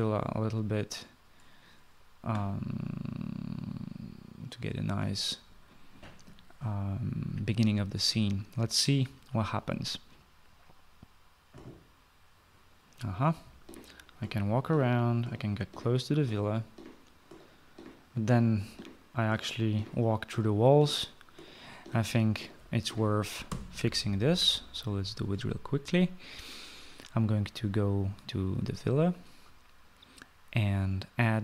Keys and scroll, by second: 13.9-24.2 typing.